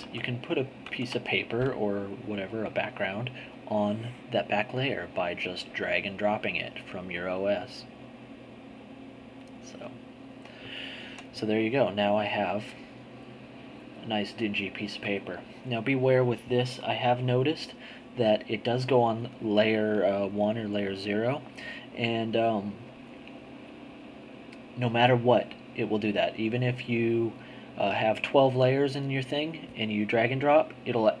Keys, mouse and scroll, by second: 0.3 alt+Tab, 0.8 alt+Tab, 3.4-6.4 drag, 9.4 middle click, 11.1 z, 12.3-12.7 scroll up 2.